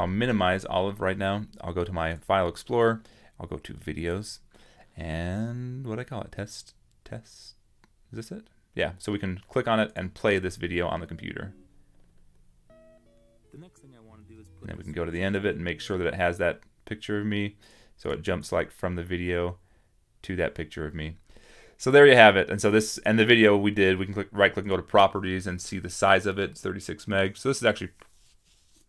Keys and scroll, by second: 6.3 super+-.